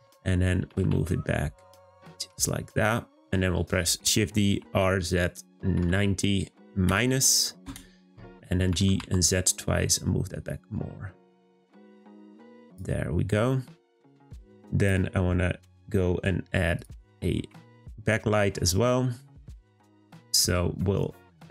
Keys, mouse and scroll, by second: 0.5 g, 4.0 shift+d, 12.6 click, 13.1 scroll up 2, 18.0-18.4 scroll down 3, 18.4-19.6 middle drag, 19.6-20.0 scroll down 4, 20.4-21.5 middle drag.